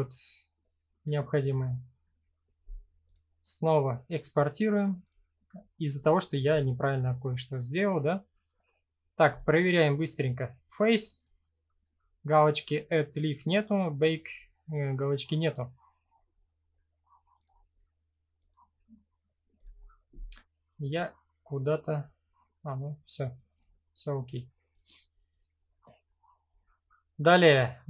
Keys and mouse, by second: 2.6-4.7 drag, 17.0-19.3 drag, 24.3 click.